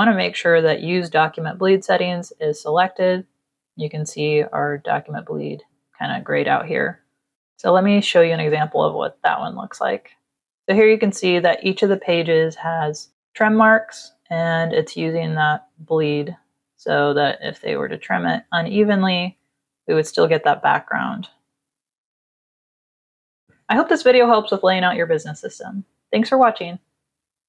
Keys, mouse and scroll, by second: 9.3 click, 10.3 click, 12.3 Down, 21.2 Down, 22.0 click.